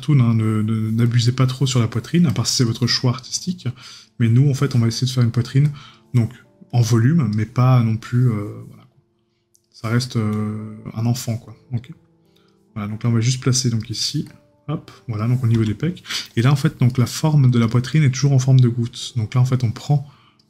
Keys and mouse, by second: 16.9 right click.